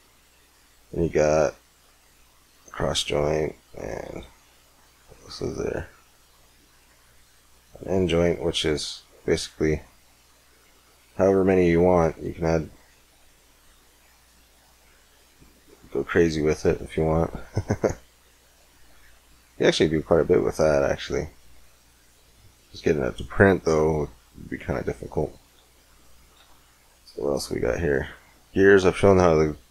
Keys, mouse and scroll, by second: 3.0-5.2 drag, 3.8 x, 4.4 shift+a, 8.2-9.6 middle drag, 10.0-11.5 middle drag, 11.5-13.7 drag, 13.7 middle click, 14.8 middle click, 21.4 middle click, 22.6 middle click, 24.9-26.2 middle drag, 25.5 x, 26.2 shift+a.